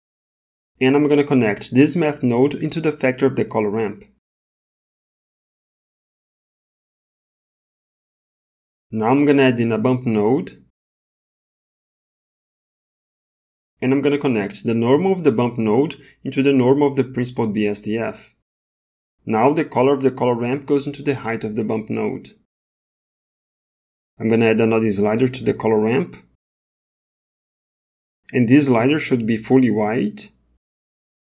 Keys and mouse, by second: 0.0 click, 0.3 click, 1.8-3.2 drag, 3.9 click, 4.0 click, 5.3 middle click, 6.9-7.3 drag, 7.4 t, 7.4 g, 8.8 click, 9.7 shift+a, 15.2 click, 15.5-16.5 drag, 17.3 click, 17.6 click, 20.2 click, 20.5-21.8 drag, 24.6 click, 26.3 middle click, 27.3 middle click.